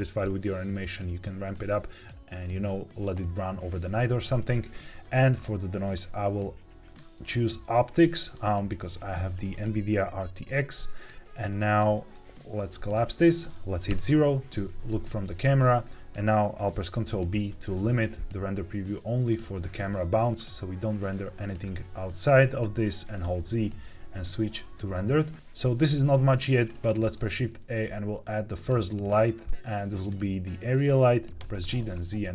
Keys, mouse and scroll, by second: 4.9 drag, 5.3-5.8 scroll down 1, 5.8-6.9 drag, 8.2 click, 12.0 click, 13.8 KP_0, 17.0 ctrl+b, 23.1 z, 26.9 shift+a, 30.8-31.3 scroll down 2, 31.3 g, 31.5 z.